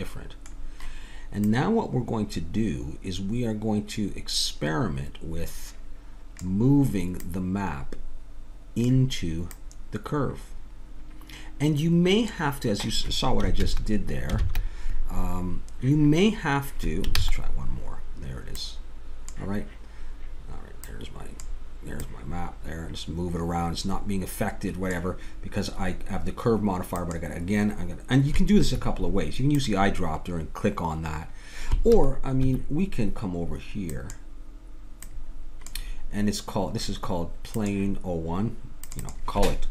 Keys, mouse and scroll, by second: 1.4-6.3 drag, 7.2-11.6 drag, 13.5 ctrl+z, 14.4 ctrl+z, 17.2 ctrl+z, 18.6-20.4 drag, 20.9-24.9 drag, 27.0-32.9 drag, 33.9-39.7 drag.